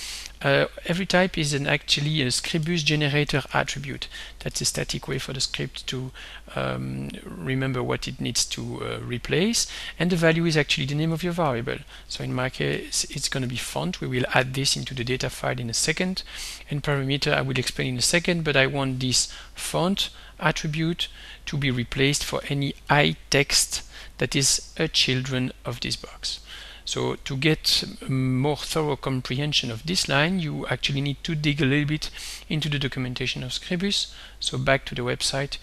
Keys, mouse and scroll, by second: 0.2 click, 1.1 shift+s, 2.3-5.6 typing, 7.4 click, 9.5 click, 10.1 click, 11.4-14.6 typing, 16.2 click, 16.7 click, 17.7 shift+7, 22.1-23.8 typing, 24.9 click, 32.4 click, 34.9 click.